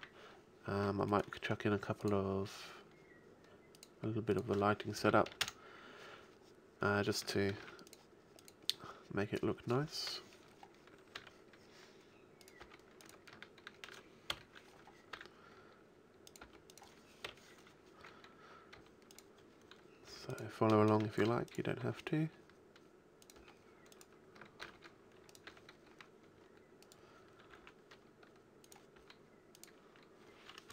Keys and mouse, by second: 0.0 Escape, 2.0-2.4 middle drag, 3.6-6.2 drag, 7.6 shift+d, 8.0-8.4 drag, 10.1 KP_7, 11.2 r, 12.6 g, 14.3 KP_1, 15.2 r, 16.4 g, 17.3 KP_7, 18.8 g, 20.1 g, 21.2 shift+d, 21.8 r, 23.4-25.1 drag, 23.4 g, 24.7 shift+d, 25.5 drag, 25.5 r, 27.6 r, 29.0 g, 29.8 a.